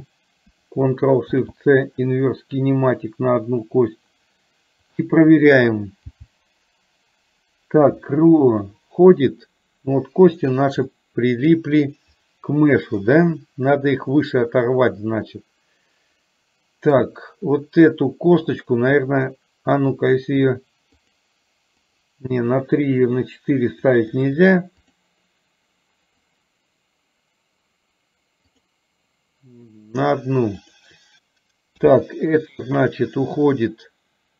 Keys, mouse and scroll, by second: 6.1 g, 11.0 middle click, 13.1-17.1 middle drag, 18.4 click, 19.9 click, 22.0 click, 24.2 click, 24.5 click, 26.5 click, 31.9 g.